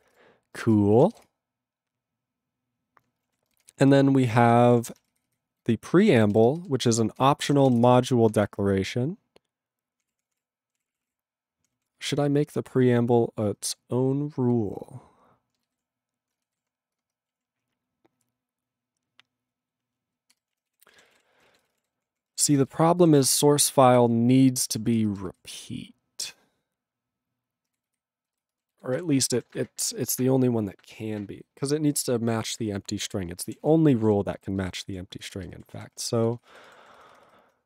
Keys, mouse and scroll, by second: 0.9 ctrl+s, 1.3 Return, 3.3 ctrl+a, 3.6 ctrl+space, 3.6 ctrl+n, 3.8 ctrl+g, 4.3 ctrl+p, 5.2 alt+f, 5.7 alt+b, 6.5 ctrl+space, 6.9 ctrl+alt+f, 7.2 ctrl+g, 7.9 Return, 8.5 ctrl+p, 10.0 ctrl+e, 10.2 ctrl+p, 10.3 ctrl+e, 11.0 ctrl+p, 11.1 ctrl+e, 11.6 ctrl+p, 11.9 ctrl+n, 13.6 ctrl+f, 15.8 ctrl+alt+b, 16.6 alt+b, 17.0 ctrl+space, 17.3 ctrl+e, 20.3 ctrl+g, 20.7 ctrl+s, 20.9 ctrl+space, 20.9 ctrl+a, 21.1 ctrl+g, 21.1 ctrl+e, 21.3 ctrl+n, 21.5 ctrl+a, 21.5 ctrl+n, 21.6 ctrl+space, 21.7 ctrl+e, 21.8 ctrl+g, 22.0 ctrl+p, 22.5 ctrl+s, 22.8 alt+b, 23.9 alt+f, 24.6 alt+b, 25.1 ctrl+space, 25.4 ctrl+alt+f, 27.7 ctrl+g, 27.9 ctrl+f, 28.3 ctrl+b, 28.4 ctrl+space, 28.8 ctrl+alt+b, 29.0 ctrl+g, 29.4 ctrl+s, 34.1 ctrl+alt+b, 35.2 ctrl+space, 35.7 ctrl+alt+f, 35.8 ctrl+g, 36.9 ctrl+s, 37.0 ctrl+f.